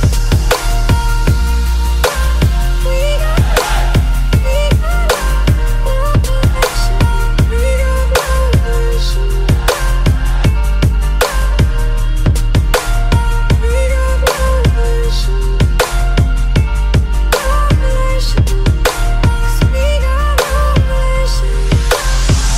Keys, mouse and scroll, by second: 0.0 click, 0.1 click, 0.2 click, 0.4 click, 0.7 click, 0.8 click, 1.0 F9, 5.1 click, 5.2 middle click, 5.3 middle click, 10.2 middle click.